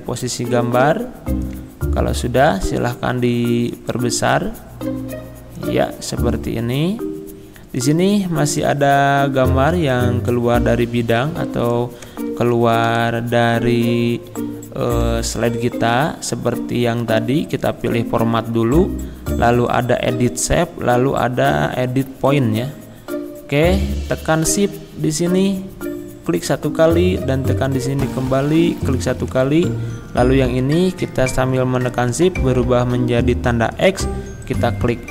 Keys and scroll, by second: 12.5 Down, 12.9 Right.